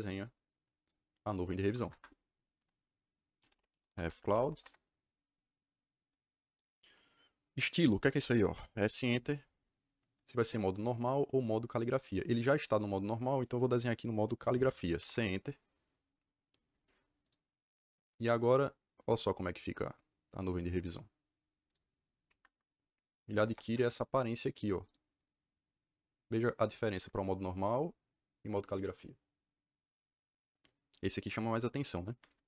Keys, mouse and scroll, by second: 1.5 Escape, 1.7 Escape, 1.8 Escape, 3.1-4.8 typing, 8.5 s, 8.9 KP_Enter, 14.9 c, 15.0 KP_Enter, 17.2 click, 21.6 click, 22.3 Escape, 23.3 m, 23.3 Return, 24.3 click, 24.8 right click, 25.0 click, 27.2 click, 32.0 Escape.